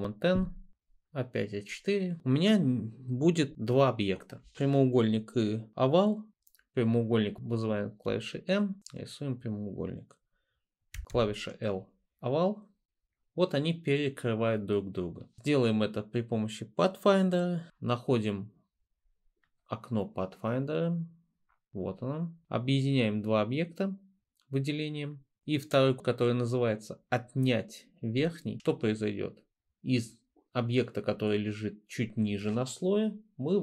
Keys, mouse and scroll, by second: 8.1 m, 11.2 l.